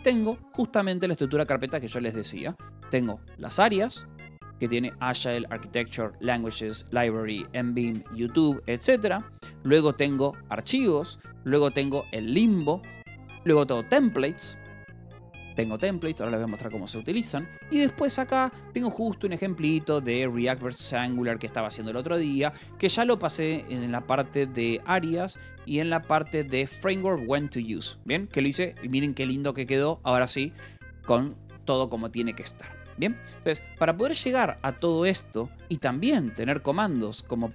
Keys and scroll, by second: 3.6 Return, 4.9 j, 9.0 :, 9.8 j, 10.0 Return, 10.8 :, 11.3 j, 11.5 Return, 12.7 :, 13.0 j, 13.3 Return, 15.9 :, 17.6 j, 17.9 k, 18.5 Return, 18.9-23.5 typing, 23.1 Return, 24.7 Return, 25.1 j, 25.7 k, 26.3 j, 26.9 Return, 27.5 j, 28.8 k, 30.7 j, 31.5 Escape, 33.2 shift+;, 34.2-36.8 typing, 37.3 Escape.